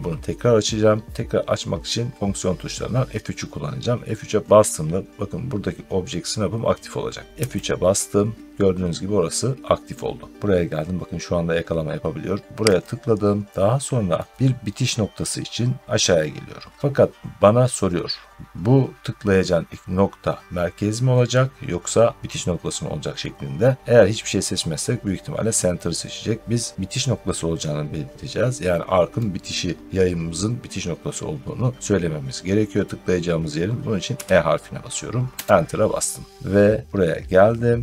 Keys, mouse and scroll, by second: 7.3 F3, 10.1 middle click, 12.2-12.7 scroll up 1, 12.7 click, 14.1 middle click, 14.7 middle click, 34.0 e, 35.3 Return.